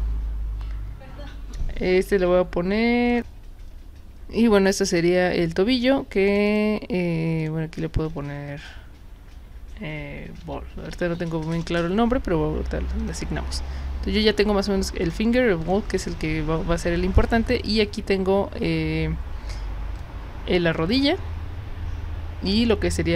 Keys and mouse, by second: 3.1 click, 6.3 click, 6.5 click, 7.4 click, 10.2-11.6 typing, 13.0 click, 15.0 click, 15.6 click, 17.6 click, 19.9 click, 22.5 drag.